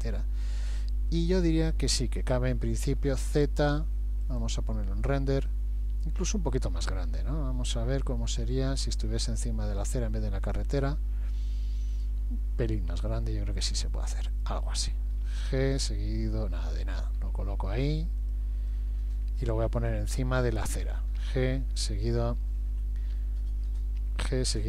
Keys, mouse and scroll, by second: 1.2 KP_3, 3.1 z, 8.5 g, 12.9 s, 15.3 g, 18.7 middle click, 21.2 g.